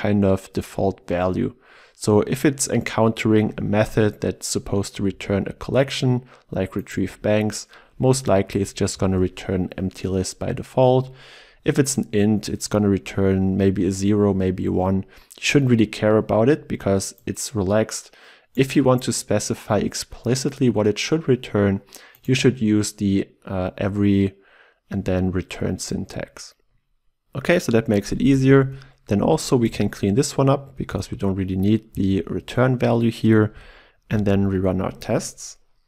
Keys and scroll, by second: 7.0 ctrl+b, 9.1 ctrl+alt+Left, 29.7 alt+Return, 34.1 shift+F10.